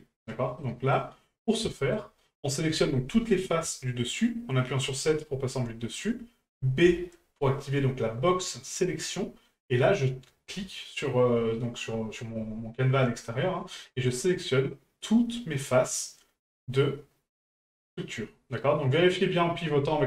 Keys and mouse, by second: 0.6-0.9 middle drag, 1.7 shift+middle drag, 17.4-19.3 middle drag.